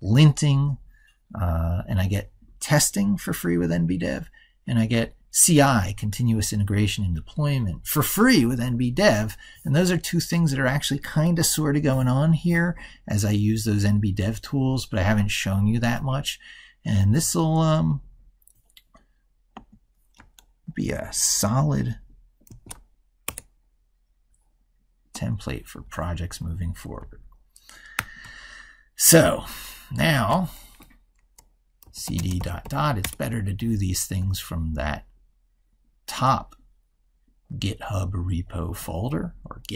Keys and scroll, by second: 22.3 ctrl+shift+r, 27.8 ctrl+super+Right.